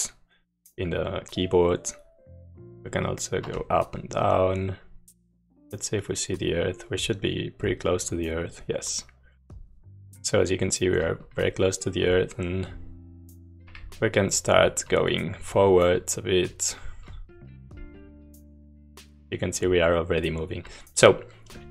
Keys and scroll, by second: 2.6 Down, 2.8 Down, 2.9-3.5 Down, 3.7 Up, 4.1 Up, 4.4 Up, 4.5-9.9 Up, 10.3 Left, 10.5-13.7 Left, 14.2 Down, 14.3 Down, 14.6-15.7 Down, 16.5 Left, 16.8 Down, 17.4 w, 17.6 w, 17.8 Left, 20.7 Down.